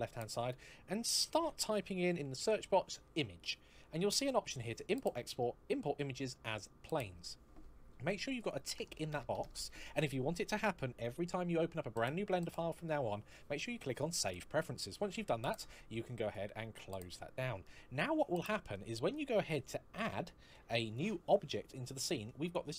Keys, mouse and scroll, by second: 1.0-2.2 typing, 14.1 click, 16.1 click, 17.5 middle click, 20.4 shift+a.